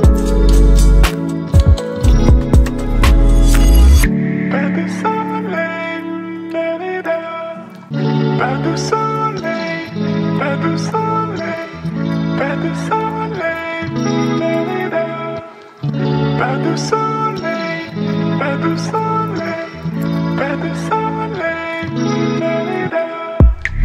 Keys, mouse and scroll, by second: 0.5-7.0 drag, 7.0 alt+scroll up 1, 7.9-11.0 drag, 11.0 ctrl+0, 12.5 v, 15.0 t, 15.8 click, 16.9-18.5 typing, 19.4 ctrl+a, 21.0 click, 22.2 ctrl+v, 23.5 Return.